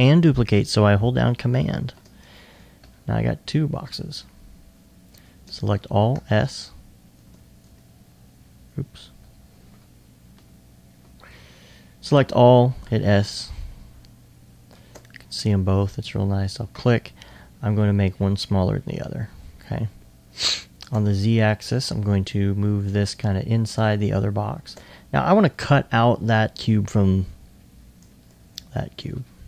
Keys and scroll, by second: 3.9 alt+s, 4.0 alt+s, 12.8 s, 14.0 s, 17.3-18.0 typing, 21.1 typing, 28.7 shift+s.